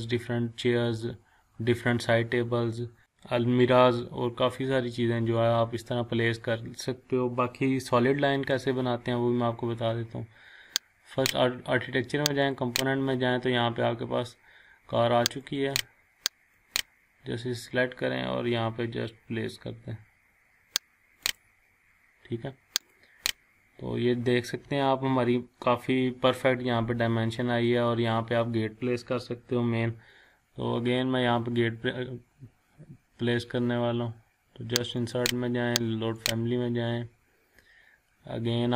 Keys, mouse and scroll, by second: 1.2-1.6 scroll down 1, 2.6 scroll, 4.0-4.4 scroll down 1, 6.1-6.4 scroll up 1, 11.2 click, 15.4 click, 21.2 click, 23.6 scroll down 1, 24.0 scroll up 1, 26.9-27.3 scroll down 1, 27.7 scroll up 1, 35.0 click.